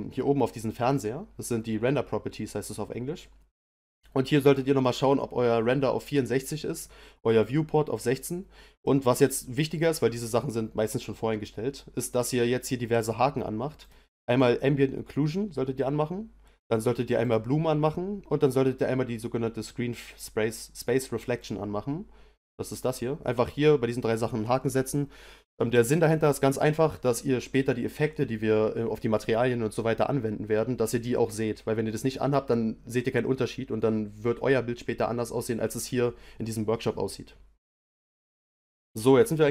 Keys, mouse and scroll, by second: 13.8 click, 17.2 click, 21.4 click, 22.3 click, 22.7 click.